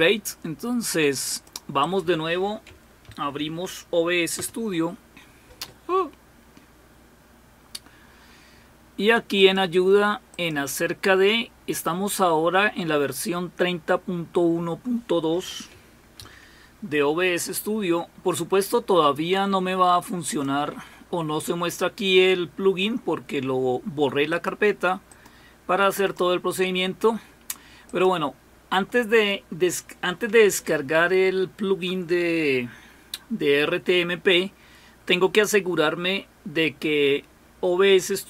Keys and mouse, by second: 1.3-2.5 drag, 3.1 alt+super+d, 4.4 Return, 9.4 click, 10.3 click, 16.2 super+w, 20.4 click, 24.3 click, 25.1 click, 26.0 click, 26.6-28.8 drag.